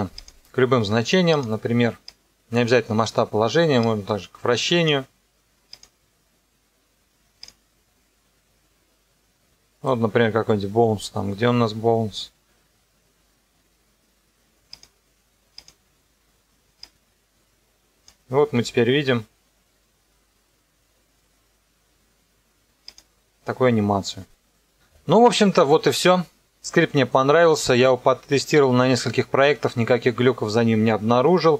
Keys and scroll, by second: 18.5 KP_0.